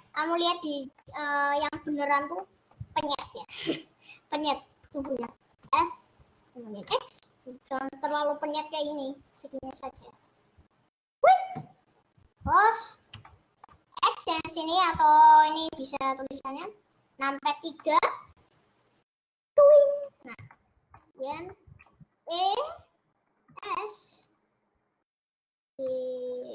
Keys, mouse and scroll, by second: 0.1-1.4 middle drag, 1.4-2.2 scroll up 1, 2.2-2.7 scroll up 1, 2.7-5.7 middle drag, 5.7 s, 12.7 click, 13.3-14.7 middle drag, 14.7-15.6 scroll up 3, 17.9 middle click, 18.3 scroll down 3, 19.5 KP_3, 20.8-21.5 scroll up 4, 20.9 shift+middle click, 21.5 shift+middle click, 22.3 e, 23.6 s, 25.9 g.